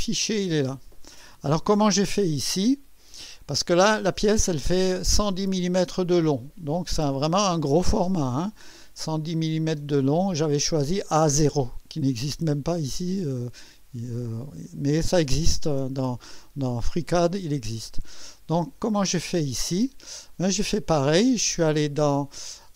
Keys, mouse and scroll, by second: 12.4 click, 17.8 click.